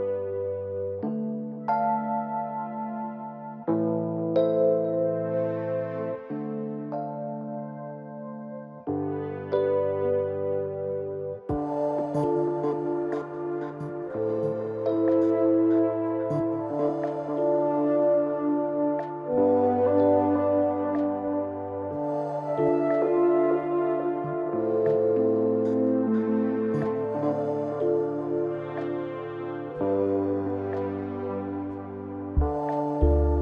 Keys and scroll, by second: 29.9 ctrl+t.